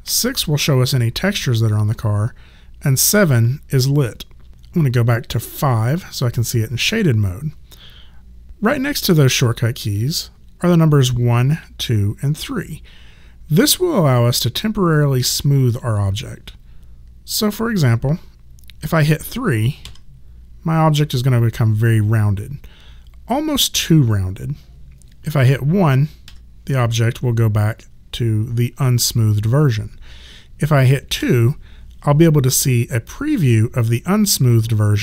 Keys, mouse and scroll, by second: 0.1 6, 4.5 5, 19.8 3, 26.3 1, 31.2 2.